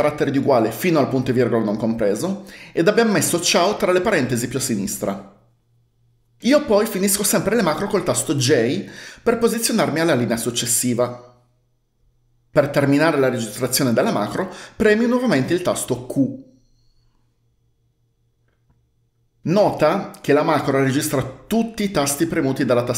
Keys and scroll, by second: 8.6 j, 16.3 q.